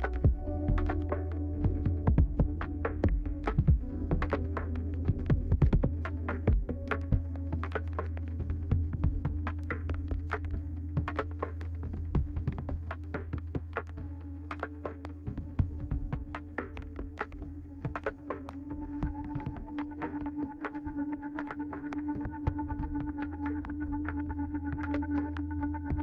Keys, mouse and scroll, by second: 0.2 9, 3.6 click, 4.5-5.5 scroll down 2, 4.7 middle click, 5.1-7.6 right drag, 9.1 middle click, 9.6-10.2 scroll down 2.